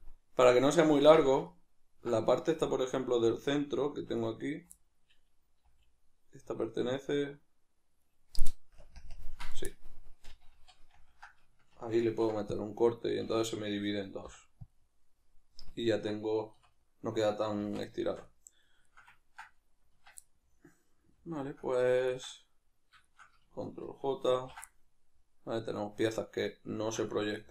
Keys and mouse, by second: 1.2 z, 3.4 alt+right click, 4.8 middle click, 5.6 g, 8.2 right click, 8.8 ctrl+KP_Add, 10.3 ctrl+z, 10.3-15.8 middle drag, 16.5 \, 17.2 middle click, 17.6 z, 18.0-23.0 shift+middle drag, 19.9 Tab, 23.0 shift+right click, 24.4 ctrl+j, 24.7-27.5 middle drag.